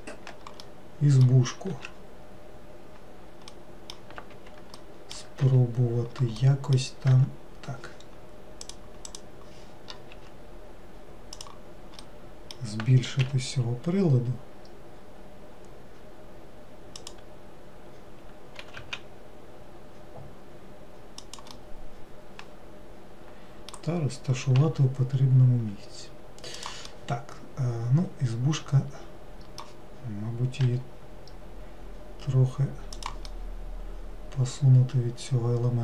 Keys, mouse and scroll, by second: 0.7-1.8 middle drag, 1.8 s, 3.6 middle click, 4.4 Escape, 4.9-5.5 middle drag, 5.5 s, 6.5 middle click, 7.2 Tab, 8.7 click, 9.1 click, 12.1-13.3 middle drag, 13.3 g, 21.6-24.7 middle drag, 24.7 g, 27.0-30.1 middle drag, 33.4-35.8 middle drag.